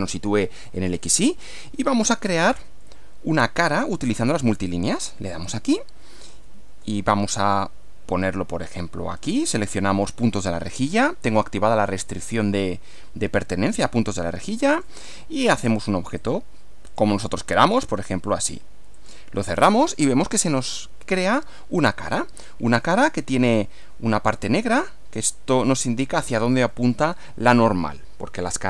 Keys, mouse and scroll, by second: 2.9-4.3 middle drag, 5.5 click, 6.9 shift+middle click, 10.7 click, 14.7 click, 15.6 click, 16.2 click, 16.9 click, 17.6 click, 18.9 click, 19.7 click, 21.4-23.1 middle drag, 23.8-24.5 middle drag, 25.5-26.5 middle drag, 26.7 middle click.